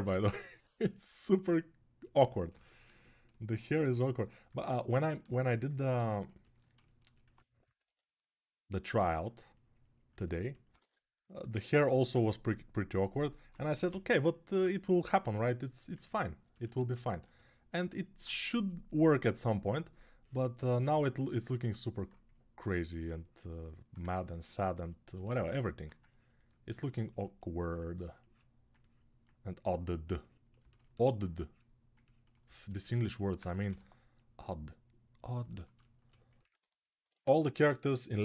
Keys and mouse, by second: 0.0 shift+r, 2.0-6.2 ctrl+right drag, 2.4 ctrl+r, 6.2-10.5 ctrl+alt+drag, 7.6 3, 10.5 ctrl+z, 13.2 1, 13.7 [, 14.2 [, 15.7-38.2 drag, 33.4 g.